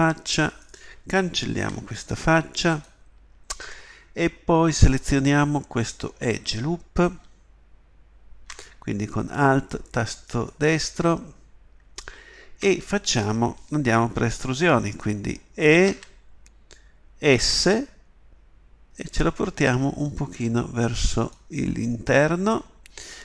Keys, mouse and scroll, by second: 1.6 Delete, 4.7-7.0 drag, 5.1 right click, 15.9 e.